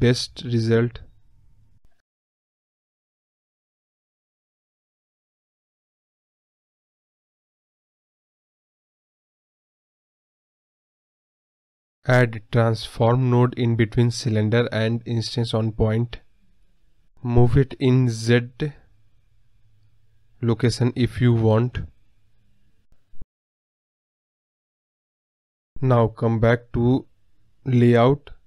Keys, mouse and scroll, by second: 3.1 scroll down 3, 3.2-6.3 middle drag, 6.3 scroll down 2, 6.3-6.9 middle drag, 6.9-7.7 scroll up 1, 7.7-8.4 scroll up 1, 8.4 scroll down 1, 8.5-20.5 middle drag, 20.5 scroll down 1, 20.7-21.3 middle drag, 21.3 scroll up 1, 21.3-21.8 middle drag, 21.8 scroll down 1, 22.0-23.1 middle drag, 23.1 scroll up 1, 23.2-26.9 middle drag, 26.9 scroll down 1, 27.2 click, 27.9-28.3 scroll up 2, 28.3-28.4 scroll down 1.